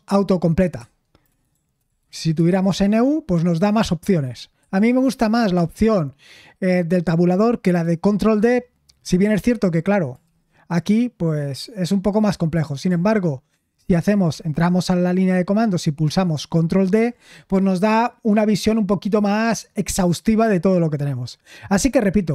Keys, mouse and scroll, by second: 1.2 BackSpace, 1.5 BackSpace, 1.8 BackSpace, 2.1 BackSpace, 2.3 Tab, 10.5 shift+;, 10.7 Tab, 14.3 shift+;, 16.9 ctrl+d.